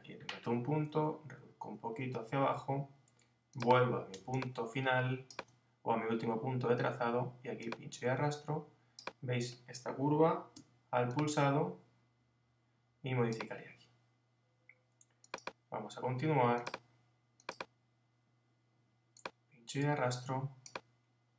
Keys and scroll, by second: 0.7 Down, 1.5 Left.